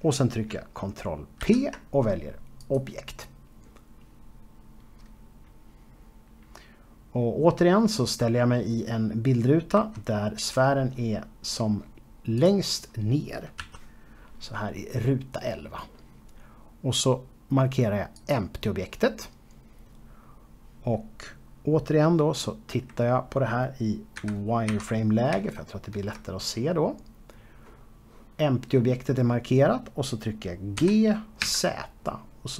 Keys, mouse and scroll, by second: 0.3-1.5 scroll down 1, 4.7 click, 10.8-12.5 scroll up 1, 13.4 click, 14.7 scroll up 1, 16.1-17.9 scroll up 2, 19.2 click, 23.8 KP_1, 25.2 z, 26.5 shift+middle click, 27.5-27.9 scroll up 2, 28.2 scroll up 2, 30.1 scroll up 1, 31.9 g.